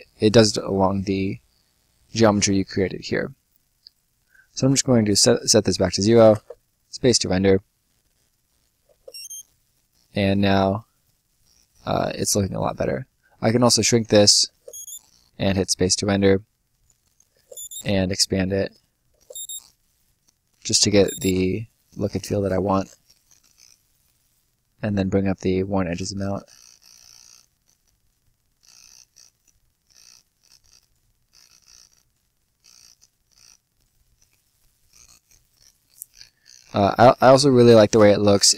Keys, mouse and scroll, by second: 0.9 scroll down 1, 1.7 middle click, 4.0 click, 6.2 space, 7.0-8.0 scroll down 1, 8.4 right click, 8.8 space, 9.5 right click, 10.1-10.7 scroll up 1, 10.7-11.3 scroll down 1, 11.3 right click, 13.4 click, 14.4 space, 16.8 click, 17.3 space, 18.6 click, 19.1 space, 20.4 click, 20.8 space, 21.7 right click, 22.4 scroll down 1, 22.6 right click, 23.0 scroll down 1, 23.2 right click, 23.9-25.8 scroll up 1, 25.8 click, 28.4 click, 34.1-34.8 scroll up 1, 34.8 right click, 35.2 scroll down 1, 35.4 right click, 35.8-36.6 scroll down 1, 36.9 right click.